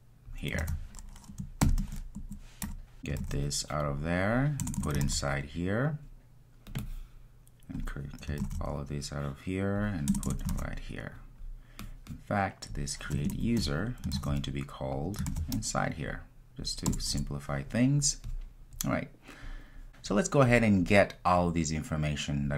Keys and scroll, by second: 0.6 super+v, 3.3 super+x, 5.1 super+v, 8.5 super+x, 10.6 super+v, 14.2 super+v, 15.3 super+v.